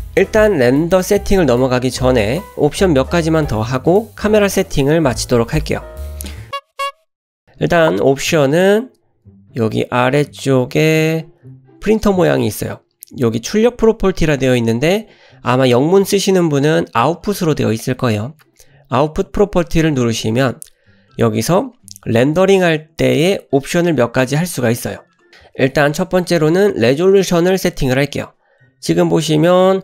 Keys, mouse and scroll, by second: 19.7 click.